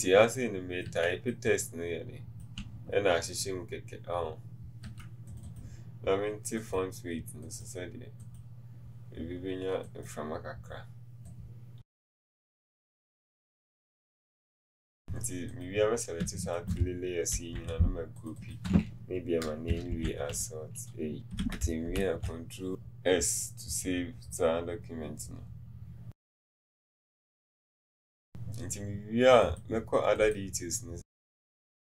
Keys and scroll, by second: 12.0 Escape, 13.1 Down.